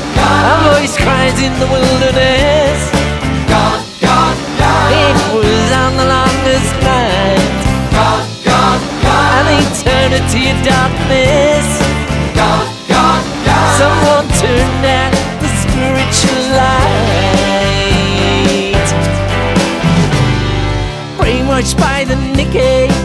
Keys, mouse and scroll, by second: 2.7 ctrl+z, 3.7-6.1 drag, 7.4 click, 8.0 click, 9.0 click, 13.9 click, 14.4-15.6 typing, 16.9 click, 18.6 click, 19.4 click, 21.3 click.